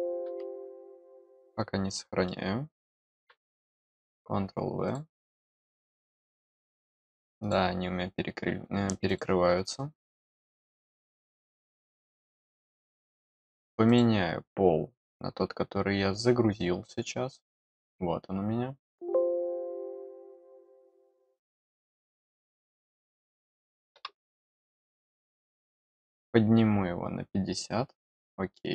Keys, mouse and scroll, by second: 1.0 click, 1.8 middle click, 4.8 click, 5.7 middle click, 7.3 click, 9.0 click, 12.4 click, 13.8 click, 15.2 middle click, 16.9-18.7 middle drag, 18.7 click, 20.9 click, 22.5 click, 24.7 middle click, 25.4 click, 28.5 middle click.